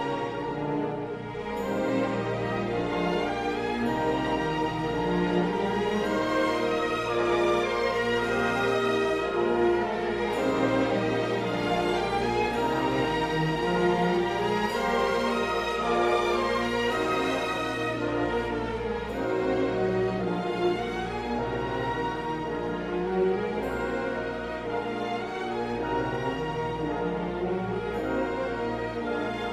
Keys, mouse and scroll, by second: 0.8 q, 6.6 middle click, 7.8 d, 9.0 click, 9.4 click, 14.3-17.3 drag, 18.1-19.1 middle drag, 19.9 shift+middle click, 20.5-21.5 middle drag, 23.1 w, 24.5 2, 25.9 click, 26.4-28.2 middle drag.